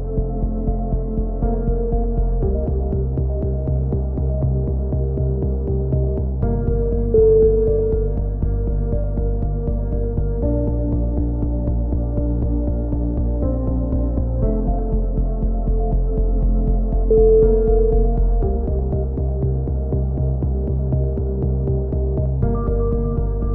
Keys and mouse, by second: 2.1 a, 2.5-3.5 drag, 3.5-6.2 middle drag, 6.2 click, 6.7 b, 8.6 b, 11.3 t, 12.3 click, 14.2-19.1 middle drag.